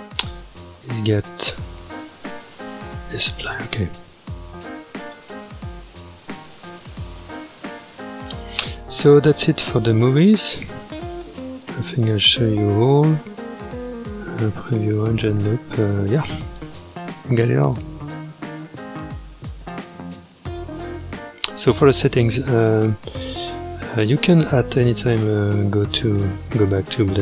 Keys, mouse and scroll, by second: 2.6 space, 3.7-4.3 scroll down 1, 4.3-5.0 scroll up 2, 5.0-7.4 drag, 7.4-8.3 scroll down 2, 8.3-10.3 scroll up 2, 10.3-14.5 scroll down 2, 15.4-18.4 scroll up 1, 18.4-19.6 scroll down 2, 19.6-21.1 drag, 21.1 scroll down 2, 22.2-25.2 scroll down 5, 26.1-27.2 drag.